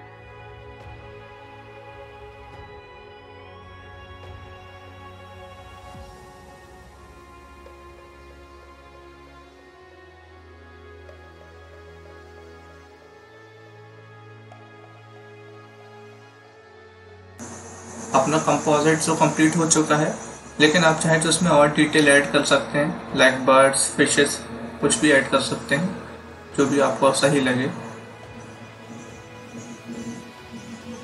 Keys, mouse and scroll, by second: 1.2 ctrl+z, 1.5 click, 3.1 space, 3.2 click, 3.3 space, 3.5 click, 4.8 space, 5.0 click, 6.5 space, 6.5 click, 6.7 space, 6.9 click, 8.2 scroll down 1, 8.5 click, 8.9 scroll up 1, 9.4 click, 9.6 scroll up 1, 10.1 click, 10.8 scroll down 1, 11.3 click, 12.3 0, 13.3 click, 14.8 click, 17.3 Delete.